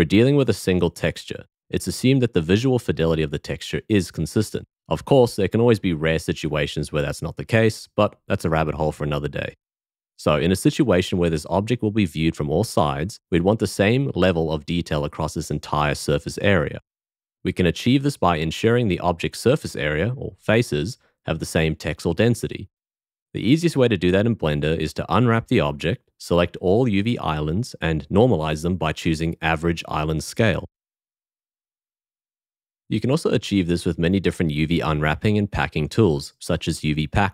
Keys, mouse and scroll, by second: 24.7 a.